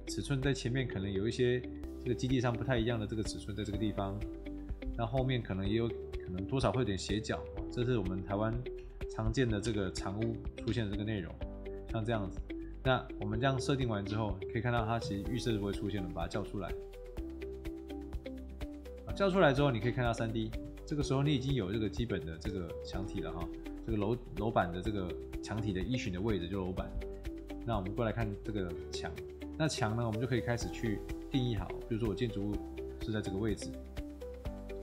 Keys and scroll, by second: 3.2 Escape, 4.1 Delete, 7.6 Escape, 8.7 Delete, 9.2-11.2 typing, 11.3 Escape, 33.3 Escape, 34.7 Escape.